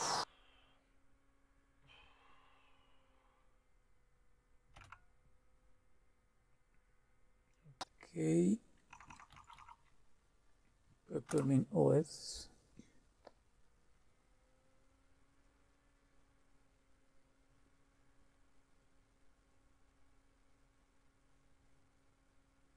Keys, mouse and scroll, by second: 4.8 Return, 8.9 Down, 9.0 Down, 9.3 Up, 9.6 Up, 11.3 Return.